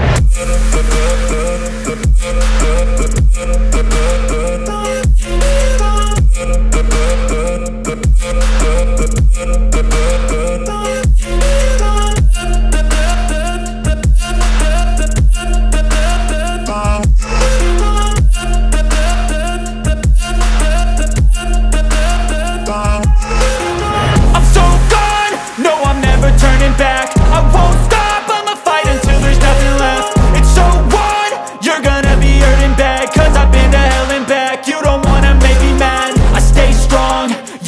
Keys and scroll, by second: 1.6 space, 2.8 Delete, 5.0 Delete, 11.3 Escape, 15.3 ctrl+g, 16.2 c, 17.5 ctrl+z, 17.9 Escape, 20.8 F3, 24.3 F4, 24.6 Escape, 24.8 F3, 25.4 F2, 27.7 w, 28.9-34.3 typing, 34.6 ctrl+space.